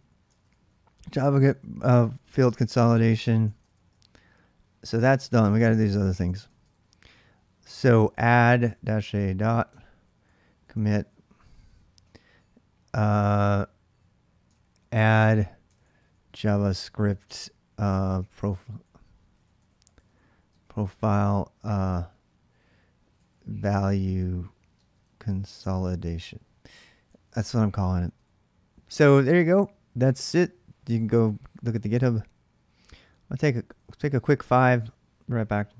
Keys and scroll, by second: 0.0-11.8 typing, 9.5 Return, 14.2-20.5 typing, 22.6-28.1 typing, 32.5-33.9 typing.